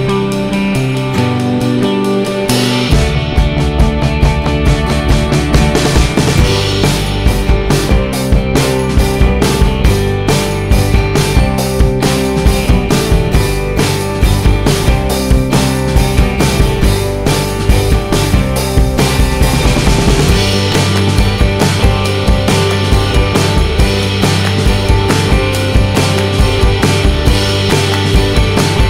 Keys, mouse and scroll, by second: 1.1 middle click, 2.0 middle click, 2.2-2.5 scroll down 1, 3.5 alt+middle click, 6.3 click, 6.5 click, 8.1 click, 8.2 click, 11.2 click, 11.5 click, 13.2 alt+q, 17.3 click, 20.4 click, 20.5 click, 27.3 click, 27.4 click, 28.1 click, 28.5 click.